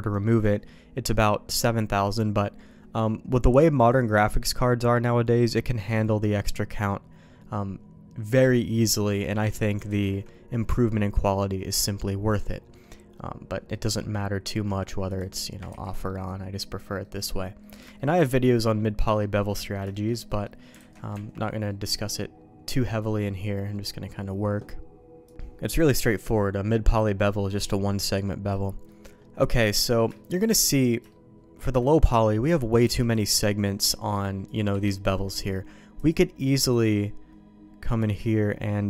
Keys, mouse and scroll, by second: 0.3 click, 9.9 ctrl+z, 12.5 middle click, 13.7 middle click, 15.7 ctrl+z, 16.0 middle click, 17.0 middle click, 17.6 middle click, 17.9 shift+middle click, 18.3 middle click, 19.0 middle click, 19.5 middle click, 19.9 shift+middle click, 20.2 middle click, 20.7 alt+a, 21.1 Tab, 21.6-22.8 middle drag, 23.7 middle click, 25.8 middle click, 28.2 middle click, 28.8 middle click, 29.6 middle click, 30.1 shift+middle click, 31.1 shift+middle click, 32.8 c, 35.9 click, 38.1-38.8 drag.